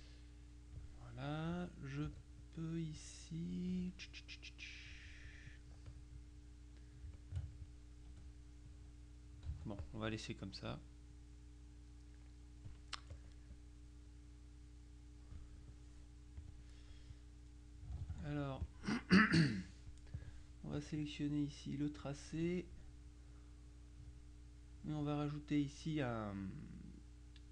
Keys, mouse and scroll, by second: 2.2 F2, 2.5 click, 4.7 middle click, 6.0 click, 7.2 shift+click, 8.2 F1, 8.7-10.4 drag, 9.6 ctrl+z, 11.1 click, 12.0 click, 13.2 click, 16.5 click, 17.2 click, 18.1 ctrl+z, 18.7 ctrl+click, 20.2 click, 22.1 click.